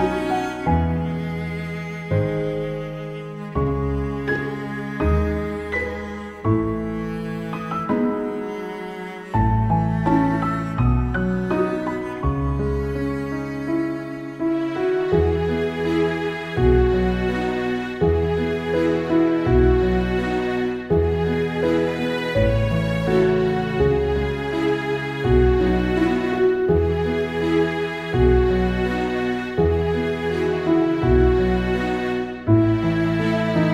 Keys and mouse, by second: 0.0 ctrl+z, 0.5 ctrl+z, 1.6 ctrl+z, 3.3 ctrl+z, 3.4 ctrl+z, 3.6 ctrl+z, 4.9 ctrl+z, 5.0 ctrl+z, 5.7 ctrl+z, 7.8 ctrl+z, 9.8 ctrl+z, 9.9 ctrl+z, 10.3 right click, 10.4 right click, 12.9 ctrl+z, 13.5 ctrl+z, 13.8 ctrl+z, 14.6 ctrl+z, 16.8 ctrl+z, 17.5 ctrl+z, 17.7 ctrl+z, 17.9 ctrl+z, 18.2 ctrl+z, 18.5 ctrl+z, 18.7 ctrl+z, 20.2 ctrl+z, 21.2 ctrl+z, 21.6 ctrl+z, 22.8 ctrl+z, 24.7 ctrl+z, 27.6 ctrl+z, 28.4 ctrl+z, 28.7 ctrl+z, 29.8 ctrl+z, 30.1 ctrl+z, 32.5 ctrl+z, 32.7 ctrl+z, 33.3 ctrl+z, 33.4 ctrl+z.